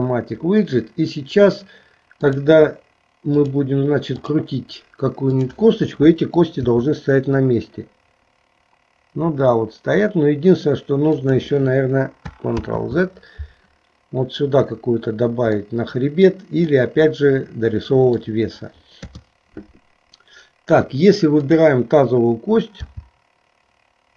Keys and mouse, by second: 3.5 click, 5.4 click, 6.6 r, 12.7 ctrl+z, 15.6 middle click, 16.9-18.4 middle drag, 19.1 KP_3, 21.4 click, 22.8 g.